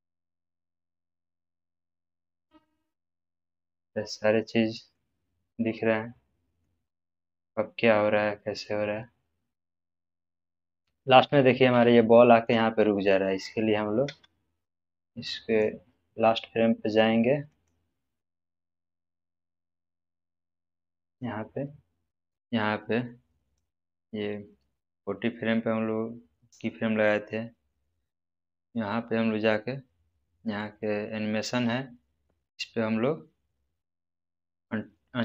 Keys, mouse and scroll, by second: 7.1-9.0 scroll up 1, 9.4-10.6 middle click, 10.7-11.8 scroll down 1, 11.9-12.5 shift+middle click, 14.0 space, 15.4-21.2 drag, 22.3 space, 23.5-26.6 drag.